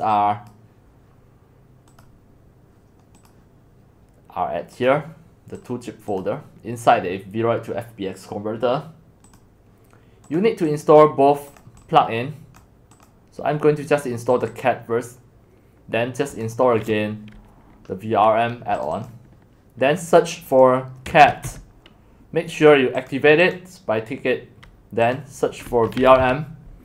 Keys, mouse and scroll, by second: 0.7-3.2 drag, 3.3-9.4 drag, 9.6-21.1 drag, 21.1-22.0 typing, 22.7-25.7 drag, 25.5-26.7 typing.